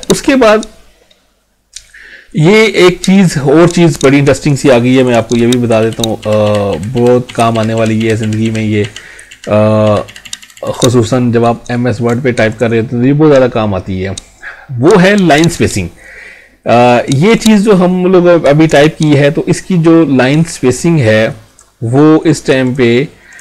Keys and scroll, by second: 5.4 ctrl+z.